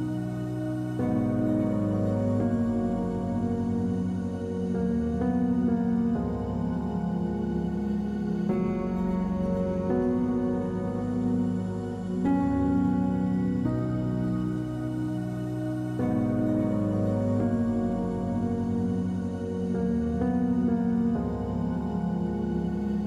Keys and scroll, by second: 0.7 w, 17.8 space, 18.7 space.